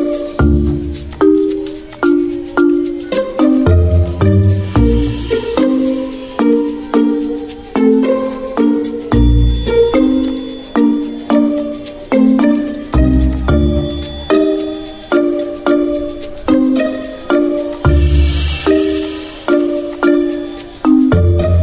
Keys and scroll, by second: 3.5-5.0 typing, 6.6 v, 8.0 ctrl+c, 8.9 z, 10.2-11.0 typing, 17.4 z, 18.7-19.4 typing, 20.2 ctrl+[.